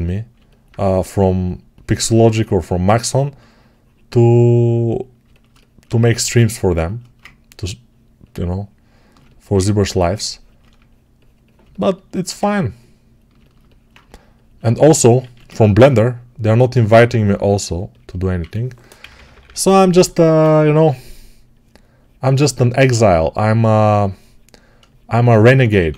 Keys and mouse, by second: 5.8 1, 8.8-15.3 ctrl+right drag, 15.1 alt+q, 18.3 1, 18.9-25.9 right drag, 18.9 [, 19.0 [, 25.6 1.